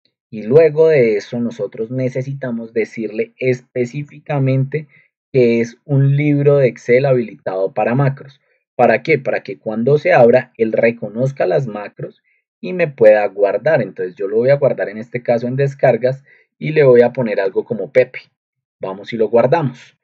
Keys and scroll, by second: 4.0 Up, 4.0 ctrl+2, 8.5 Escape, 16.9-17.9 typing, 18.3 Return.